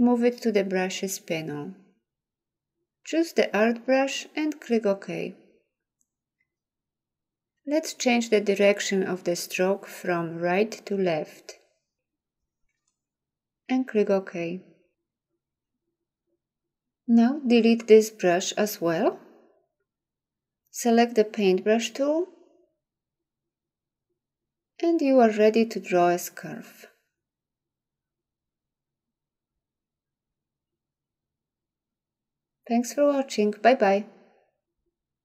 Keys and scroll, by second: 19.4 Delete.